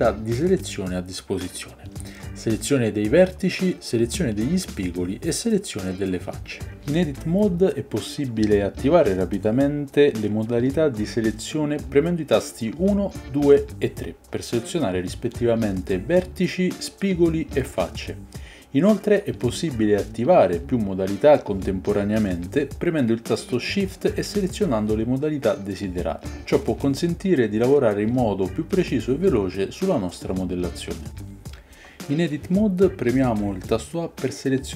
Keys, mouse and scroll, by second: 2.2 click, 2.4 middle click, 2.7 g, 3.5 ctrl+z, 4.8 g, 5.4 ctrl+click, 5.7 ctrl+z, 6.2 click, 6.8 g, 10.8-14.3 typing, 22.6 middle click, 22.7-25.8 shift+drag, 25.8 middle click, 26.4-27.8 drag, 27.8-30.1 middle drag, 30.6 middle click, 32.7 a.